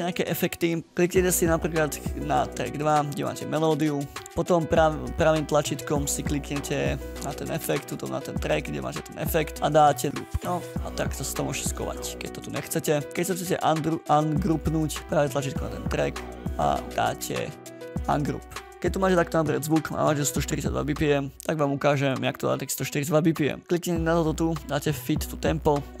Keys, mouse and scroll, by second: 12.1 scroll down 8, 12.7-13.1 ctrl+scroll up 5, 14.8 right click, 15.0 right click, 15.4 right click, 18.5 ctrl+scroll down 3.